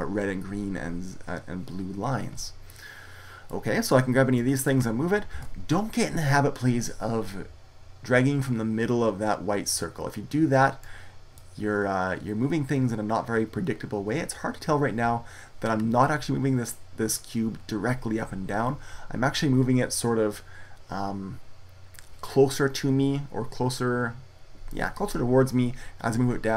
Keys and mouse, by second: 2.4 middle click, 2.8-4.2 middle drag, 4.2-5.2 drag, 5.2 ctrl+z, 10.1-12.4 drag.